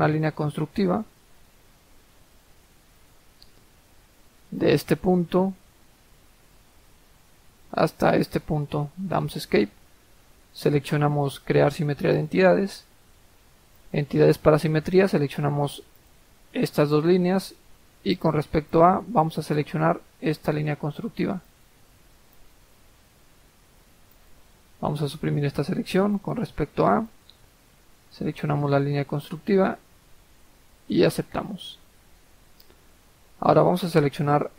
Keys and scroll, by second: 9.0 Escape, 25.1 Delete.